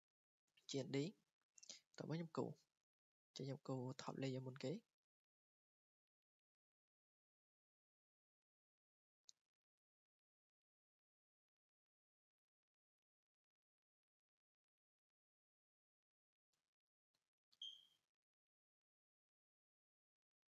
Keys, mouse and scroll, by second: 0.4 scroll, 1.9 click, 2.6-3.3 scroll, 3.8 scroll down 7, 4.9 scroll up 4, 5.6-6.3 scroll down 3, 7.7 click, 8.2 scroll down 1, 8.3 scroll, 9.2-9.7 scroll, 10.7 click, 10.8 scroll down 1, 10.9 scroll down 1, 11.1 scroll down 1, 11.3 scroll down 1, 11.3 scroll down 1, 11.5-12.1 scroll down 1, 12.1 scroll, 12.2 scroll, 12.3 scroll, 14.5 click, 14.9-15.2 scroll, 15.8 scroll, 16.3 scroll down 5, 16.8-17.5 scroll up 6, 17.8-18.1 scroll down 2, 18.5 scroll down 5, 18.5-20.3 scroll up 8, 20.3 click, 20.4 scroll.